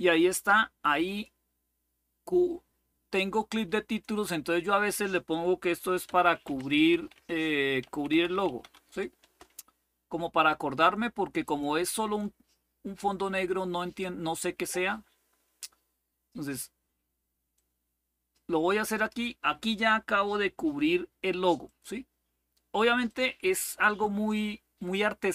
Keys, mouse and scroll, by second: 0.8 click, 1.4 click, 3.6-4.6 drag, 5.6-8.8 typing, 9.0 Return, 11.2 click, 11.2 typing, 12.8-15.4 drag, 17.3-18.8 drag, 21.5 click, 22.8 click.